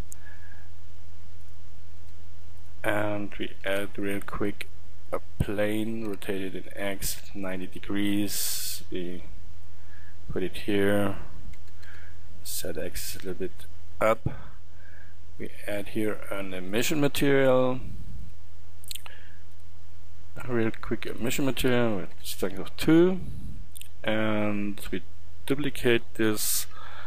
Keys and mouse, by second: 1.5-3.7 drag, 2.0 g, 3.7 shift+a, 6.1 r, 8.7 click, 9.6 click, 10.6-14.2 middle drag, 11.6 g, 21.2-26.5 drag, 26.5 shift+d.